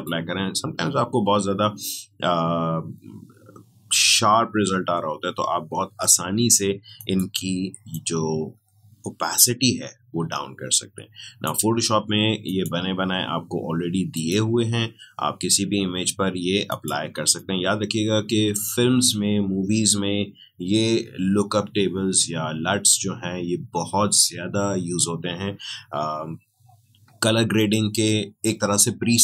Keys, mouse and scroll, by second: 6.9-12.4 drag, 16.6-21.2 drag.